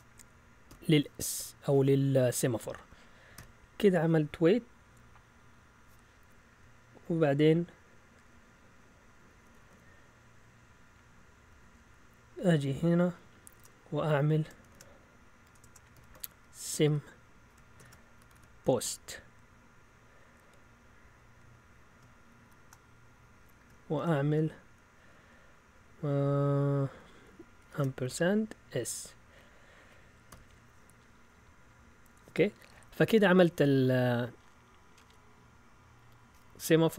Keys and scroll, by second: 0.7 s, 2.7 Right, 3.3 ;, 8.9 Down, 9.1 Down, 9.5 Down, 9.7 Down, 11.5 Down, 13.5 Return, 14.6-19.3 typing, 22.4 typing, 23.9-24.9 typing, 27.6 &, 28.0 s, 29.7 Right, 30.3 ;.